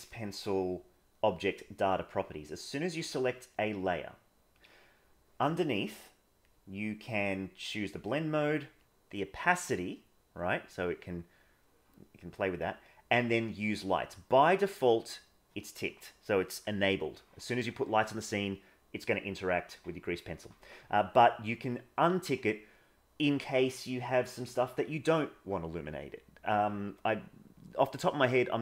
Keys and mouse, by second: 6.1 click, 8.8-12.3 drag, 21.5 click.